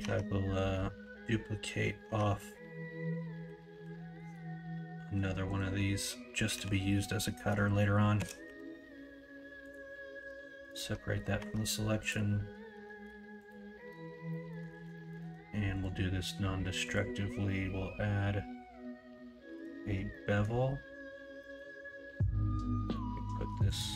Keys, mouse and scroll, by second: 0.0 Tab, 2.0 Tab, 3.4 ;, 3.8 ;, 6.5 l, 8.1 shift+d, 10.1 p, 11.3 Tab, 12.7 Tab, 13.0 Tab, 13.9 Tab, 14.3 middle click, 14.6 alt+z, 14.9 alt+middle click, 15.2 alt+z, 16.9-20.1 drag, 20.1 middle click, 21.4 middle click.